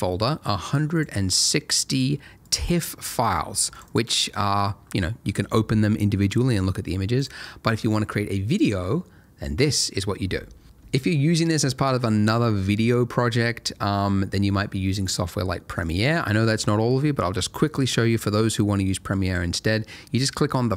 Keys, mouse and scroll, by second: 0.9 click, 3.8 double click, 5.5-6.0 scroll up 1, 6.1-7.1 scroll down 1, 7.1 click, 15.8 click, 15.9 double click, 17.6 click.